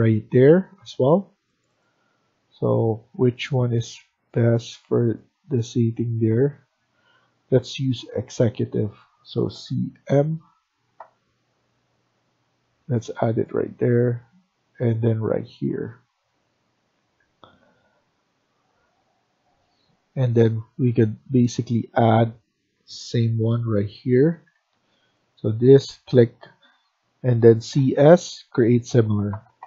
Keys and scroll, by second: 9.2-10.4 typing, 15.8 Escape, 16.7 Escape, 16.9 Escape, 22.7-23.0 typing, 24.2 Escape, 24.4 Escape, 24.6 Escape, 27.5 typing.